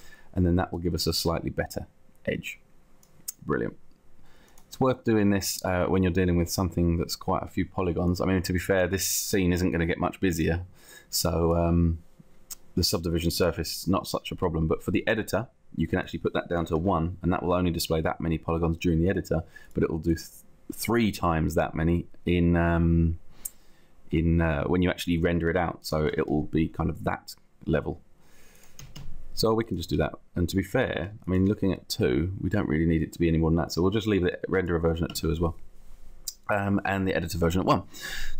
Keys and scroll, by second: 16.8 Down, 26.2 Up, 27.4 Up, 28.9 Down, 29.9 Down, 30.7 Up, 31.8 Up, 32.6 Up, 35.0 Down, 36.1 Down.